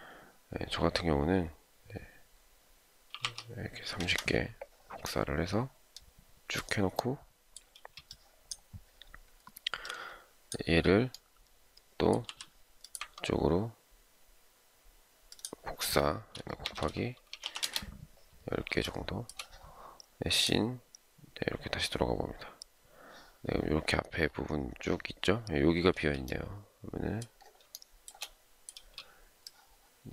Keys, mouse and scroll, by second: 3.2-3.9 typing, 7.7 space, 12.3 m, 16.9-17.9 typing, 18.8 shift+middle click, 26.0 space, 27.7 shift+middle click, 28.7 space.